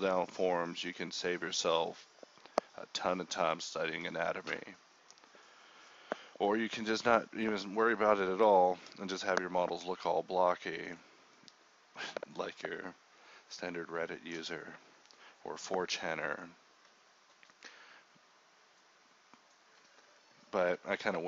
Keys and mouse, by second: 0.0 g, 0.6 Tab, 1.8 KP_1, 2.0 Tab, 3.1 click, 3.1 g, 3.9 z, 4.3 z, 4.5 click, 5.9 s, 6.2 g, 6.4 s, 6.8 click, 6.9 g, 7.2 click, 8.1-10.6 typing, 8.9 click, 11.9 z, 13.1 alt+m, 13.6 g, 14.4-16.3 middle drag, 17.3 middle click, 17.4-20.2 typing, 20.7 alt+m.